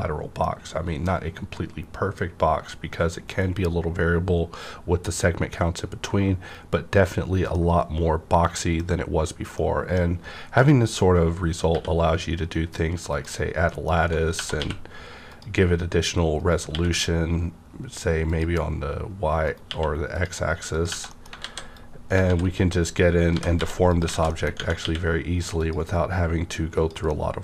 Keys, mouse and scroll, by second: 7.6-13.1 middle drag, 11.7 q, 13.1 click, 13.1 click, 13.6 middle click, 14.0 Tab, 14.5 q, 15.3 click, 16.4 right click, 16.7 q, 18.2 click, 19.4 right click, 19.6 q, 20.1 click, 20.7 click, 21.0 middle click, 21.4 alt+a, 21.7-23.3 drag, 22.3 alt+z, 23.3 typing, 23.9 click, 24.1 alt+z, 24.3 middle click, 24.5 Tab, 24.8 q, 25.5 click, 26.7 click, 27.0-27.4 middle drag.